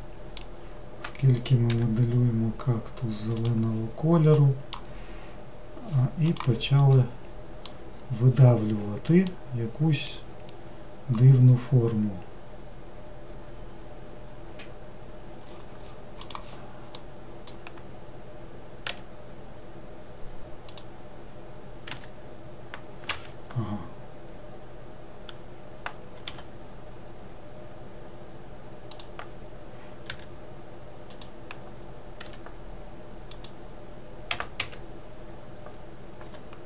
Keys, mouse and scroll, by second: 1.7 g, 4.4 middle click, 4.9-7.0 scroll down 1, 7.0-12.5 middle drag, 17.0-18.9 middle drag, 18.9 e, 22.0 e, 26.3 g, 32.3 e, 34.3 e, 36.3 g.